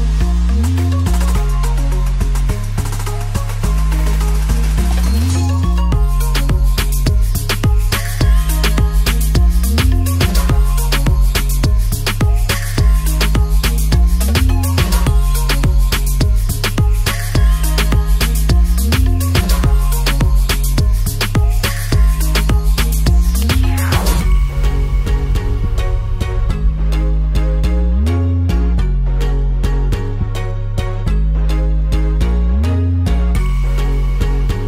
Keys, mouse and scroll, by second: 0.6 click, 2.8 shift+t, 4.3 click, 5.2 ctrl+s, 5.7-6.6 alt+middle drag, 7.2 drag, 8.2 shift+a, 10.6 middle drag, 11.4 ctrl+s, 11.7-13.3 alt+middle drag, 14.0 shift+a, 14.1 middle drag, 14.4 ctrl+z, 15.3 shift+a, 19.1 shift+s, 20.4 ctrl+s, 21.1 shift+a, 24.1 alt+middle click, 26.3 click, 27.4 click, 27.6 alt+middle drag, 29.5 drag, 29.7 alt+middle drag, 32.2 ctrl+s, 32.4 `, 33.7 click.